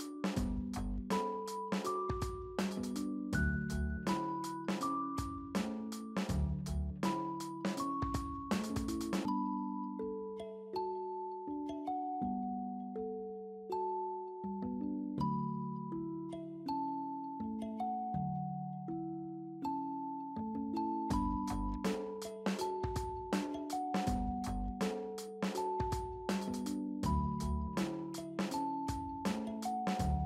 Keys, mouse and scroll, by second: 2.6 d, 15.7-17.1 typing, 27.0-27.6 scroll up 1, 27.6 middle click, 30.0 double click.